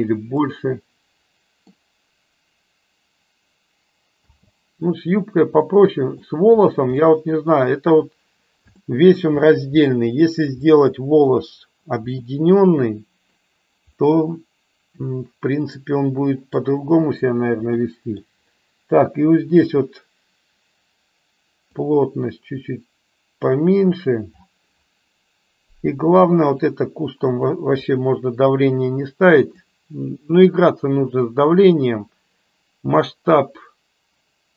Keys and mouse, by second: 0.7-2.1 middle drag, 4.4 space, 5.6-6.1 middle drag, 7.0-7.3 middle drag, 8.8 shift+middle click, 9.7-10.2 middle drag, 10.6-11.2 middle drag, 12.1-13.2 middle drag, 14.0-16.4 middle drag, 17.7 middle click, 21.7-23.3 drag, 27.2 click, 29.6 click.